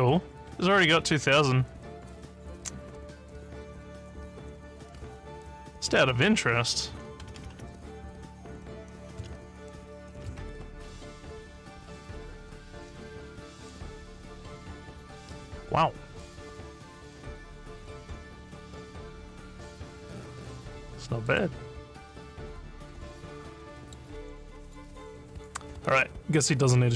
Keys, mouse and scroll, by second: 0.5 scroll up 1, 1.3 scroll up 3, 21.3 click, 22.0 scroll up 1, 22.1 scroll down 1, 22.6 scroll up 2, 23.8 middle click.